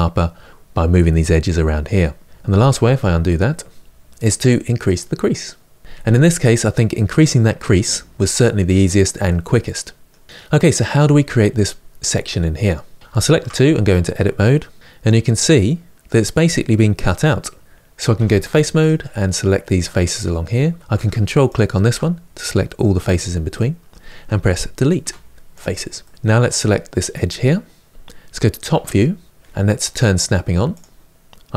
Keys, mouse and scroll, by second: 2.2 ctrl+z, 2.5 ctrl+z, 3.0 ctrl+z, 3.2 ctrl+z, 4.9 click, 5.8-8.0 middle drag, 8.0 scroll down 1, 8.1-13.0 middle drag, 13.0 shift+click, 13.2 Tab, 14.8-17.6 middle drag, 17.6 ctrl+z, 17.9 3, 18.6 click, 18.8-21.2 middle drag, 21.2 ctrl+click, 23.2-25.3 middle drag, 25.3 Delete, 25.7 middle click, 26.1 scroll up 2, 26.2 2, 26.8 click, 28.4 KP_7, 30.4 click.